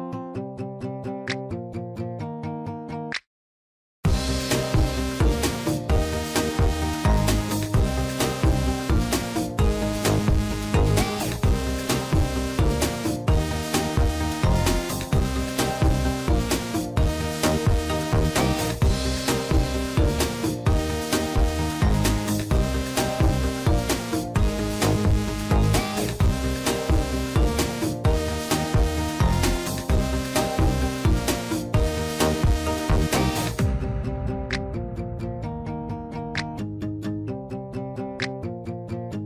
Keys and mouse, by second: 4.9-6.9 drag, 7.3 shift+middle click, 7.7 middle click, 8.4 shift+middle click, 8.7 middle click, 9.5 a, 11.0 click, 13.9 shift+middle click, 14.3 click, 16.2 shift+middle click, 17.0 shift+middle click, 17.6 click, 18.2 shift+middle click, 19.8 ctrl+right click, 20.8 shift+middle click, 23.1 shift+middle click, 24.5-27.9 drag, 29.3 shift+middle click, 30.4 ctrl+r, 35.6-37.3 drag, 38.7 click, 38.9-39.2 drag.